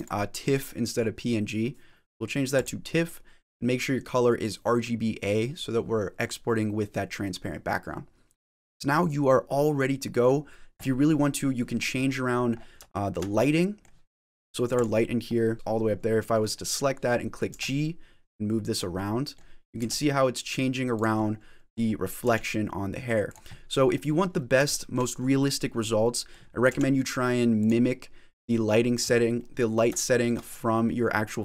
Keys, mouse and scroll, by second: 10.6 click, 11.2 middle click, 11.9-12.8 scroll down 13, 12.8 shift+middle click, 13.3 middle click, 14.6 click, 15.1 middle click, 17.4 g, 18.8 middle click, 19.6 g, 21.0 middle click, 21.7 scroll down 3, 22.1 g, 23.3 middle click, 24.3 middle click, 24.6 shift+middle click, 25.9 middle click, 26.5 g, 27.7 middle click, 29.2 middle click, 30.0 shift+middle click, 30.3 scroll up 5, 30.7 middle click, 31.3 middle click.